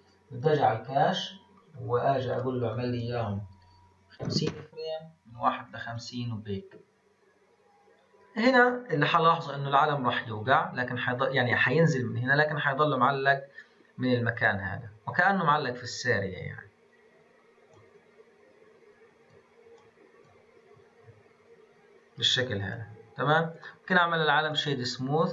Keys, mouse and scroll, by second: 0.4-0.7 drag, 0.7 scroll down 1, 1.6-2.3 scroll down 3, 2.3-5.0 drag, 5.0 scroll down 2, 5.9-12.4 drag, 16.1-23.2 drag, 23.2-23.6 scroll down 1, 23.6-25.3 right drag.